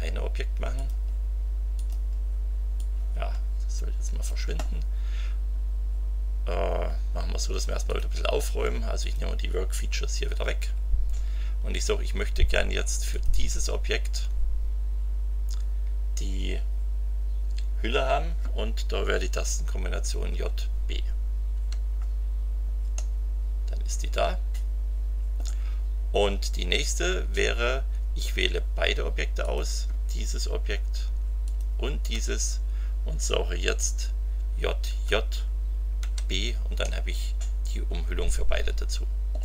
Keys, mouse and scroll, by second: 0.7 click, 1.7 click, 2.7-4.4 drag, 7.8 click, 9.0 click, 10.2 Delete, 13.1 click, 20.3 j, 21.5 b, 22.9-25.5 middle drag, 29.4 click, 31.4 shift+click, 34.3 j, 36.0 b, 36.8-39.4 drag.